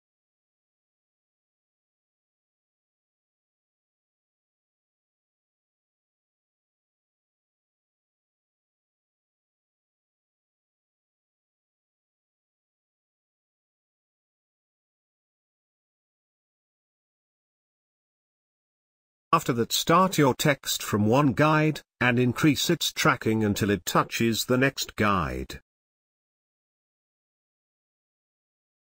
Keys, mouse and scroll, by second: 3.0 space, 3.3-9.4 ctrl+drag, 9.4 space, 9.7-15.2 ctrl+drag, 15.2 click, 15.4 space, 15.6 ctrl+click, 16.5 ctrl+click, 17.5-22.0 drag, 22.0 ctrl+space, 22.5-26.6 ctrl+drag, 26.6 Left, 28.6 click.